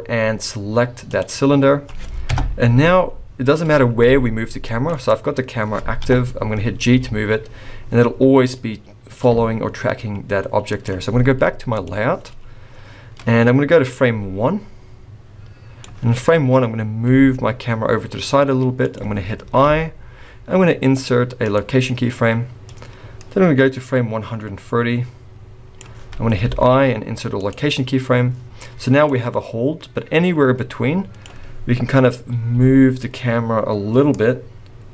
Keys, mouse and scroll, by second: 11.8 click, 12.5 scroll up 2, 14.0 click, 17.1 g, 19.6 i, 22.8 click, 26.5 i, 29.2 click, 32.6 g.